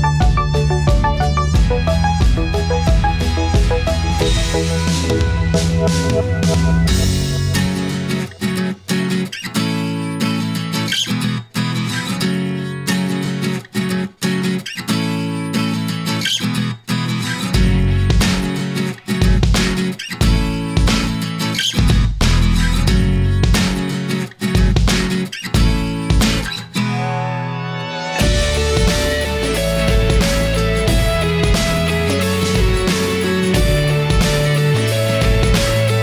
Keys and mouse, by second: 3.2-26.7 middle drag, 27.3-28.6 middle drag, 30.3-33.9 middle drag.